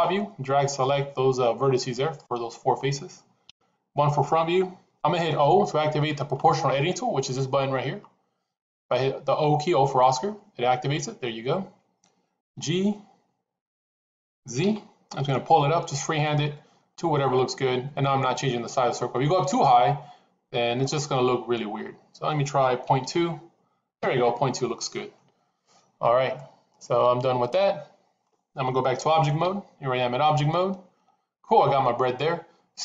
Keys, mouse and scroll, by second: 0.7-2.1 drag, 3.3 KP_1, 10.0 o, 12.3 g, 26.2-28.1 middle drag, 29.2 Tab, 30.0-32.8 middle drag.